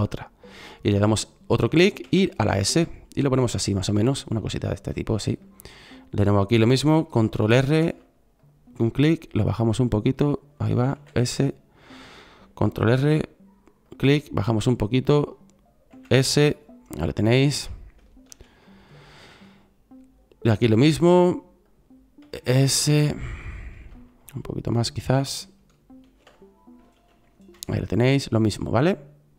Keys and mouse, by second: 1.9 s, 7.6 ctrl+r, 10.8 s, 12.9 ctrl+r, 15.8 s, 18.2 ctrl+r, 22.1 s, 24.1 s, 26.0 ctrl+r.